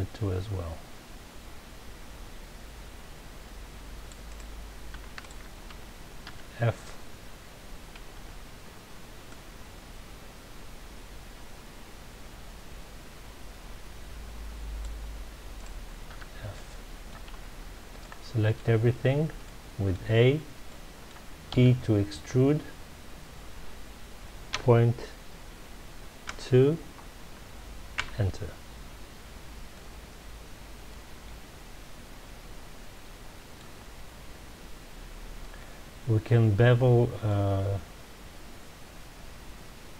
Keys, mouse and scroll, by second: 4.3 right click, 5.2 shift+click, 6.2 f, 8.0 a, 10.0 c, 15.6 right click, 16.1 f, 16.5 middle click, 17.3 a, 18.0-21.5 middle drag, 21.5 e, 28.0 KP_Enter, 29.7-32.8 middle drag, 33.8-35.3 scroll up 2, 35.3-36.6 scroll up 1, 36.6-37.1 scroll up 1, 37.3-39.9 middle drag.